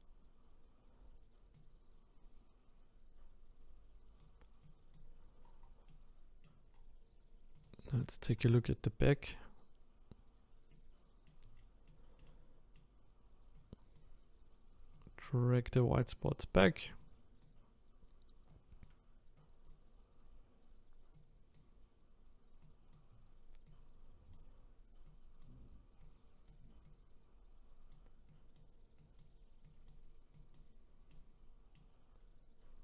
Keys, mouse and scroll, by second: 5.4-5.9 scroll down 1, 5.9 middle click, 6.7-7.6 scroll down 2, 7.6 click, 8.0 shift+middle click, 8.4 scroll up 5, 11.6-11.9 scroll down 2, 11.9-13.5 middle drag, 13.5-31.1 drag, 31.1-32.1 middle drag, 32.1-32.8 scroll up 1.